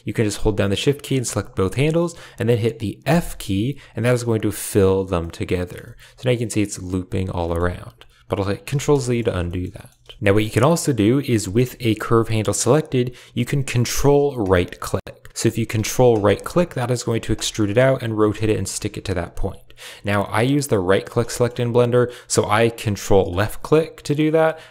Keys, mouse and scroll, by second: 0.9 shift+click, 3.0 f, 5.1 middle click, 5.7 shift+middle click, 7.3 middle click, 8.6 ctrl+z, 9.0 shift+middle click, 9.4 shift+middle click, 9.7 middle click, 9.9 a, 10.0 shift+middle click, 10.0 shift+click, 10.3 click, 11.5 g, 18.3 shift+middle click, 18.9 ctrl+click, 21.2 shift+middle click, 21.2 typing, 23.3 typing, 24.0 ctrl+click.